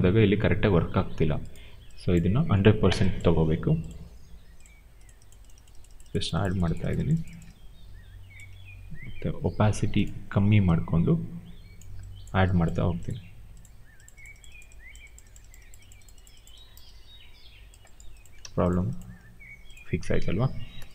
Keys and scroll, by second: 18.3 w.